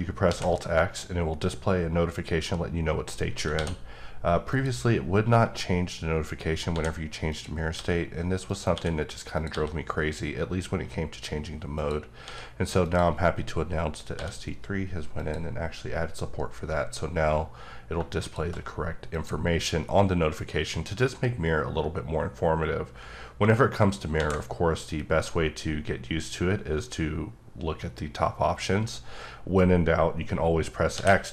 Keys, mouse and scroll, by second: 0.3 x, 3.5 d, 4.5 click, 6.7 d, 7.3 click, 7.7 d, 8.5 click, 8.7 d, 9.4 click, 9.5 d, 11.7 click, 12.2 d, 12.8 click, 14.1 d, 15.2 click, 17.9 shift+click, 23.0 alt+Num_Lock, 24.2 x, 30.9 x.